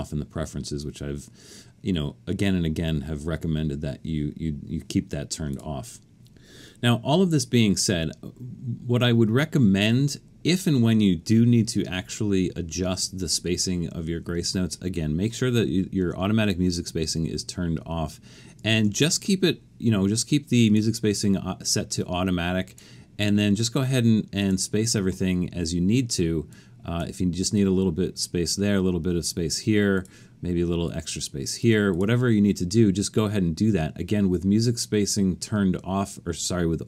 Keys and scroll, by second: 18.7 alt+super+a, 32.3 Escape.